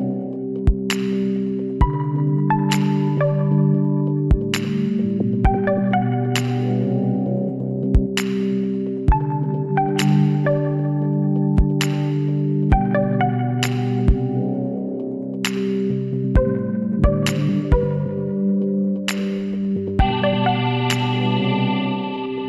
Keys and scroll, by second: 6.0 ctrl+t, 10.9 Return, 14.0-15.1 typing, 22.1 ctrl+j.